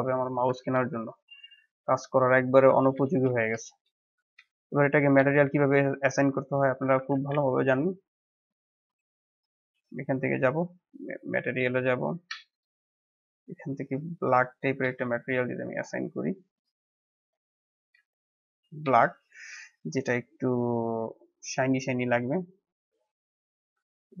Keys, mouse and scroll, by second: 1.6 drag, 2.5 click, 2.9 Delete, 3.2 scroll down 1, 3.5 scroll up 2, 3.7-4.1 middle drag, 4.1 scroll up 1, 4.4-6.6 shift+middle drag, 6.6 click, 7.2 g, 9.4 click, 10.8 click, 12.0-13.3 drag, 17.3-18.3 middle drag, 18.3-18.9 scroll up 3, 18.9 shift+middle click, 19.5-21.4 scroll down 1, 21.4-23.2 drag, 23.2 scroll down 1, 23.5-24.1 middle drag, 24.1 click.